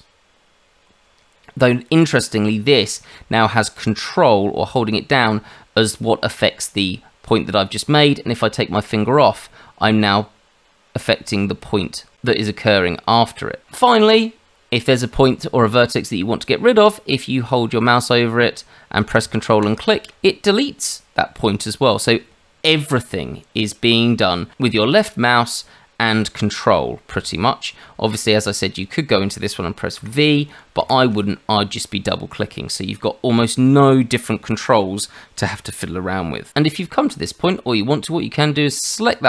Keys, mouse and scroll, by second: 19.6 ctrl+click, 28.7 click, 30.0 v, 39.1 click.